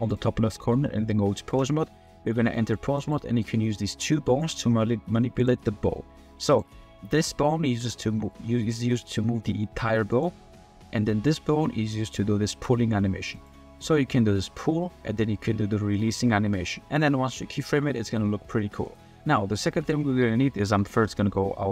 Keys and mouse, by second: 0.1-1.6 drag, 2.5 click, 3.0 click, 4.4 click, 8.1 g, 8.9 click, 9.4 g, 10.1-10.4 drag, 11.2 click, 11.8 middle click, 12.5 g, 14.0 g, 19.7 click, 20.6 click.